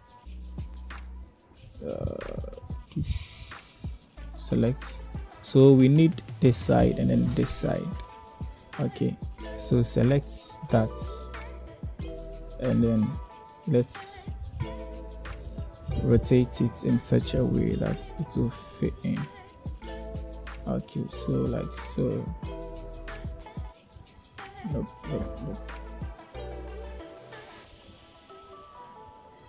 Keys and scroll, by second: 0.8 z, 6.8 a, 8.0 u, 17.6 r, 22.5 g, 23.9 s, 25.3 s, 29.1 r.